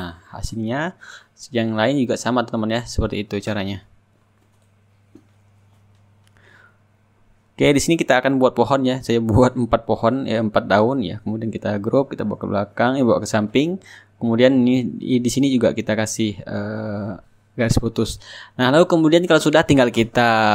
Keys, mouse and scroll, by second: 0.3 shift+click, 0.3 shift+right click, 0.7 click, 1.6 shift+right click, 2.3 click, 2.7 click, 3.0 click, 3.0 right click, 3.9 shift+click, 4.1 shift+right click, 4.2 middle click, 4.3 click, 4.3 right click, 4.5 middle click, 5.2 ctrl+shift+click, 6.0 click, 6.2 click, 6.4 ctrl+click, 6.5 Return, 6.6 ctrl+click, 6.7 ctrl+d, 6.8 ctrl+shift+click, 7.1 ctrl+g, 7.1 middle click, 7.2 ctrl+click, 7.4 ctrl+d, 7.9 ctrl+click, 8.3 shift+click, 8.3 shift+right drag, 8.7 click, 9.2 ctrl+click, 9.3 ctrl+click, 9.5 shift+click, 9.6 shift+right click, 9.7 middle click, 10.1 ctrl+shift+click, 10.6 ctrl+shift+right click, 10.7 ctrl+click, 10.9 ctrl+g, 11.0 shift+click, 11.3 shift+click, 11.6 ctrl+click, 11.7 middle click, 11.8 ctrl+click, 12.3 middle click, 12.4 click, 12.6 shift+right click, 12.9 click, 13.2 ctrl+click, 14.0-15.3 drag, 14.3 shift+right click, 15.4 shift+click, 15.4 shift+right click, 15.5-17.8 drag, 19.8 click.